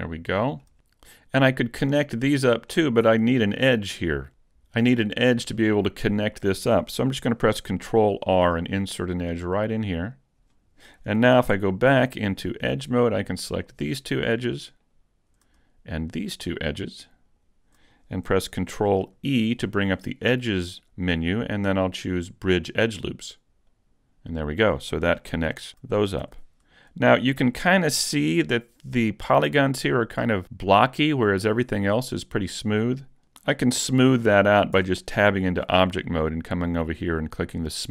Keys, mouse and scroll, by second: 2.7 middle click, 3.1-3.8 scroll up 1, 3.8-4.3 scroll down 1, 7.9 ctrl+r, 10.3 click, 11.5 ctrl+Tab, 13.5 right click, 14.7 shift+right click, 16.2 right click, 17.3 shift+right click, 19.2 ctrl+e, 26.2 a, 27.6 shift+middle click, 34.8 Tab.